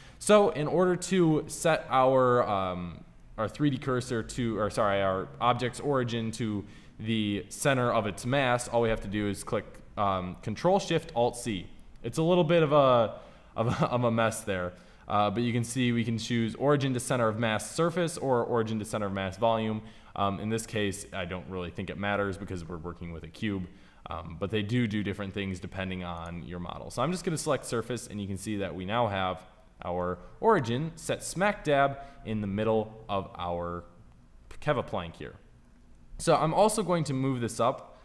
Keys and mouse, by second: 27.1-29.5 middle drag, 30.0-34.2 middle drag, 36.7 g.